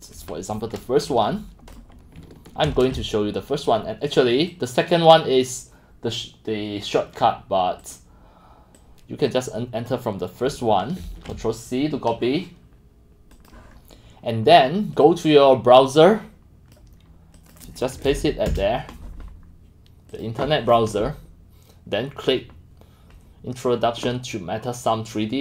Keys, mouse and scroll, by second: 2.6 ctrl+c, 7.2 click, 8.0 click, 9.9 click, 10.5 click, 11.0 ctrl+c, 13.5-15.0 drag, 16.0 click, 17.5 click, 18.1 ctrl+v, 18.5 Return, 20.2-25.4 drag.